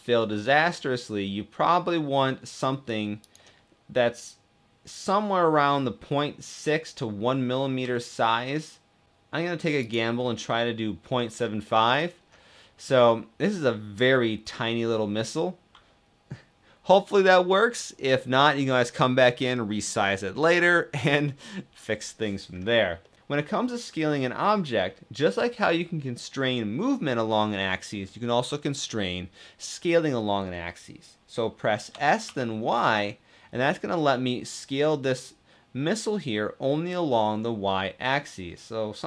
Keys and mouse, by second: 2.9 click, 7.6 s, 10.3 middle click, 11.8-13.8 middle drag, 22.7 middle click, 31.6 s, 31.9 y.